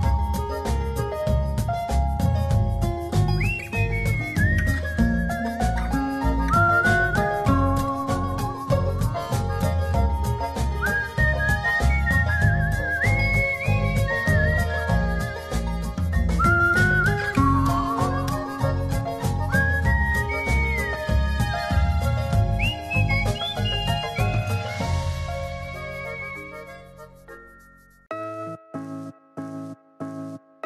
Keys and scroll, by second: 1.7 super+0, 2.7 z, 4.7 v, 10.9 super+t, 15.0 space, 17.5 Return, 17.5-18.4 typing, 18.7 alt+space, 19.5 super+space, 19.8 super+-, 22.4 super+-, 25.0 super+0.